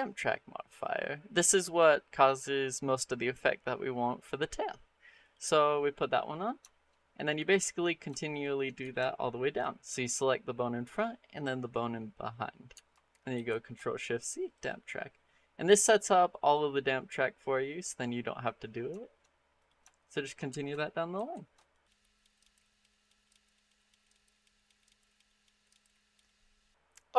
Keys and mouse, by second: 6.5 shift+middle drag, 13.2 ctrl+shift+c, 16.3 click, 18.8 shift+middle click, 19.4 click, 19.9 shift+click, 21.0 ctrl+shift+c, 21.9 shift+middle click, 22.4 ctrl+shift+c, 22.7 shift+middle click, 22.9 click, 23.1 shift+click, 23.3 ctrl+shift+c, 23.6 shift+click, 23.9 shift+click, 24.1 ctrl+shift+c, 24.4 shift+middle click, 24.7 shift+click, 24.9 ctrl+shift+c, 25.1 shift+middle click, 25.4 shift+click, 25.7 ctrl+shift+c, 26.1 shift+middle click.